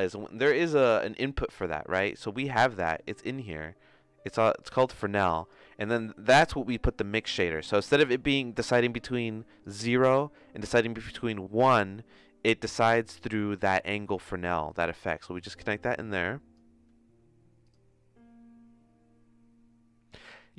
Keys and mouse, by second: 2.5 shift+a, 5.9 click, 9.7-13.6 drag, 14.6 click, 15.5-16.8 drag.